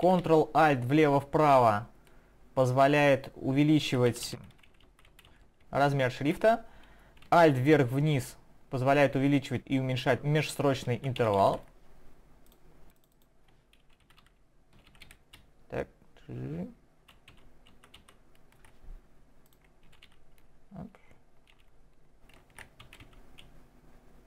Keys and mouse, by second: 12.4 click, 13.0 click, 13.1 click, 19.4 click, 19.8 shift+Down, 20.0 shift+Down.